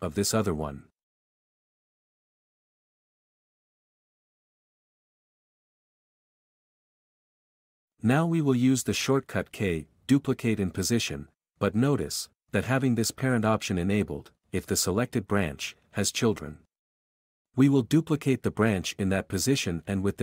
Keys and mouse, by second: 0.1 b, 0.6 b, 3.4 shift+c, 4.2 shift+r, 4.4 Escape, 4.9 q, 6.8 k, 7.1 k, 8.0 x, 14.1 g, 15.0 Escape, 16.1 click, 19.1 k.